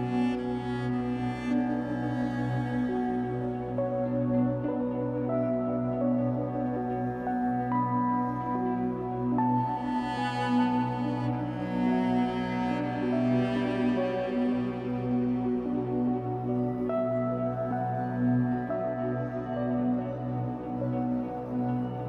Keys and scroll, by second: 11.1 space.